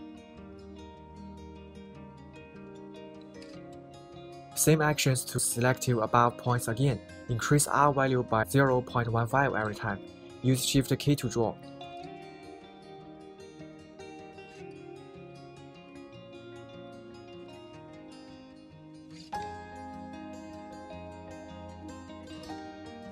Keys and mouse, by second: 1.4 shift+k, 5.2 a, 5.3 a, 5.9 b, 10.0 right drag, 13.0 shift+k, 14.9 a, 15.1 a, 15.5 b, 18.8 right click.